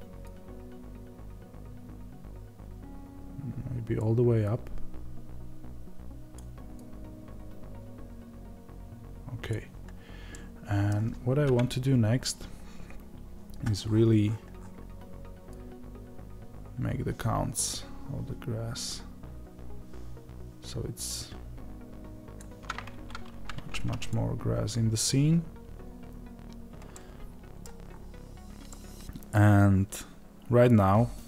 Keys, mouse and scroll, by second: 9.9-10.3 scroll down 2, 10.3-15.5 middle drag, 11.4 KP_0, 12.2-15.5 scroll up 2, 15.5-26.9 drag, 26.9-31.2 middle drag, 27.8-28.6 scroll up 2.